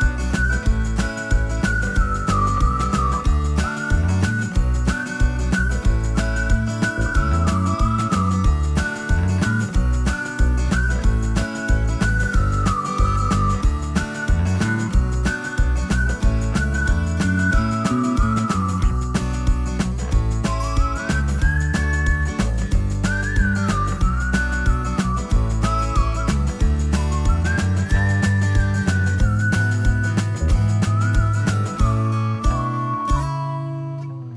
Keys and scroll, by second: 15.3-20.6 typing, 25.6 Return, 26.0-27.7 typing, 29.2 1, 30.7-34.0 typing.